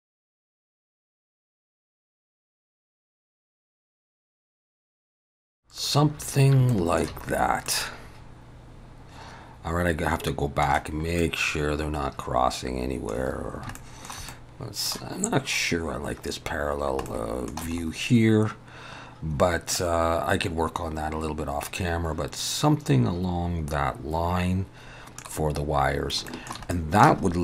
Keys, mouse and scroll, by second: 5.3 ctrl+s, 5.3 click, 6.2 scroll up 2, 6.7 shift+middle click, 7.7 middle click, 11.2 middle click, 13.3 scroll down 1, 13.8 shift+middle click, 14.3 middle click, 14.9 scroll down 1, 16.8 scroll down 1, 17.1 middle click, 17.8 scroll up 2, 19.7 middle click, 25.9 scroll down 1, 26.3 shift+middle click, 27.3 scroll up 2.